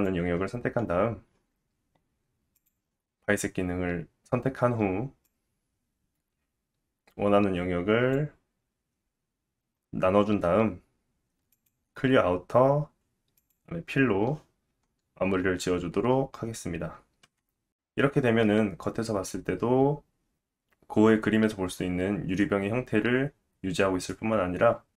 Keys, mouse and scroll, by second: 11.5 click, 13.4 click, 17.2 Tab, 17.7 click, 18.7-19.3 scroll down 3, 19.2 middle click, 22.2-23.6 scroll up 1.